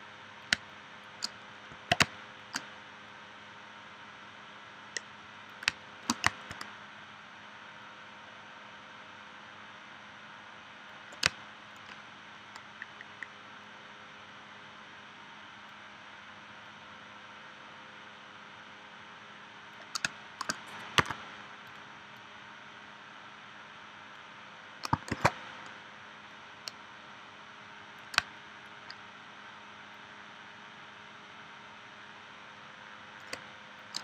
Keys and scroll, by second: 0.6 space, 2.0 space, 5.7 space, 11.3 space, 20.1 space, 21.0 a, 25.1 shift+c, 28.2 space, 33.3 space.